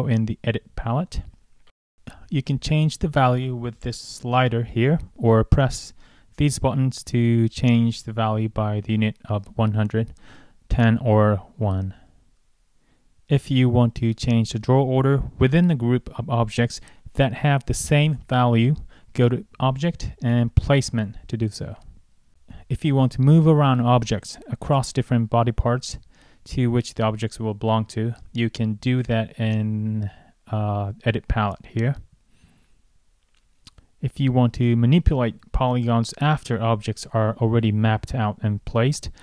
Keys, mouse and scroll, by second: 0.3 click, 11.3 click, 16.1 click, 17.6 click, 18.3 click, 19.2 click, 24.4 click, 29.5 click, 32.9-34.3 scroll up 1, 34.3 click, 39.1 click.